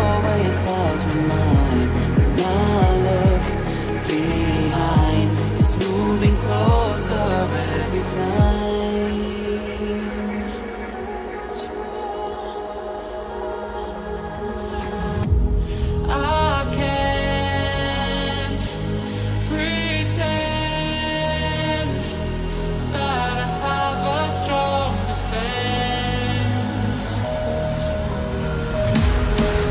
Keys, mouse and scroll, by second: 0.2 scroll up 1, 2.9 click, 4.7 click, 7.7 double click, 8.5 click, 12.3 right click, 13.5 click, 20.7 click, 21.1 double click, 22.1 click, 23.6 right click, 24.4 click, 28.0 scroll up 1, 28.6 click.